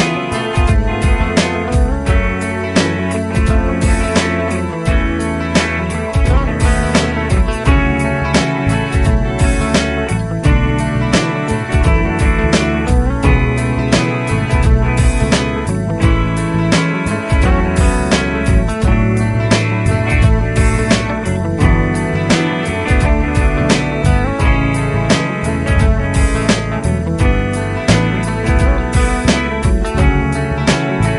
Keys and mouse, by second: 4.4 ctrl+click, 11.1 Delete, 14.2 ctrl+Right, 14.4 ctrl+Right, 14.8 ctrl+Right.